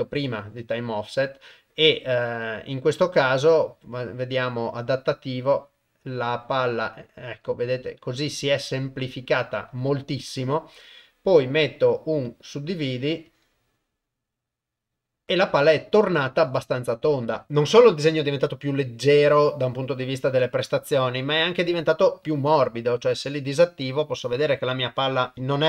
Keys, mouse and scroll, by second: 2.4-3.5 drag, 4.3-9.5 drag, 10.9-12.3 drag, 13.3-13.8 drag, 21.0 click, 23.6 click.